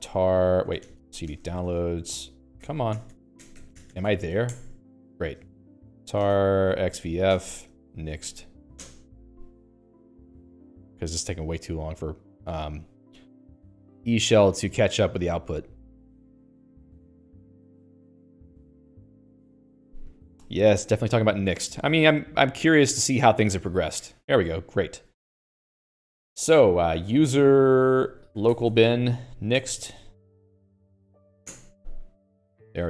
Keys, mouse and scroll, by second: 0.0-9.0 typing, 2.8 Tab, 3.7 Tab, 4.0 Tab, 9.1 Return, 12.3 click, 13.0 click, 25.3 click, 26.0 Escape, 26.5-29.8 typing, 29.9 Tab, 30.4 Home, 31.5 ., 31.8 Return.